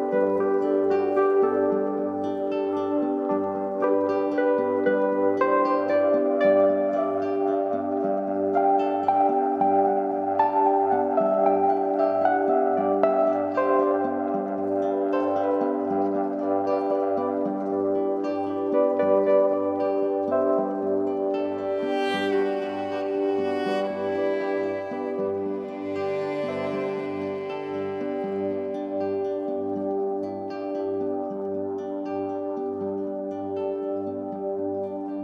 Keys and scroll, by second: 13.2 alt+BackSpace, 15.1 ctrl+d.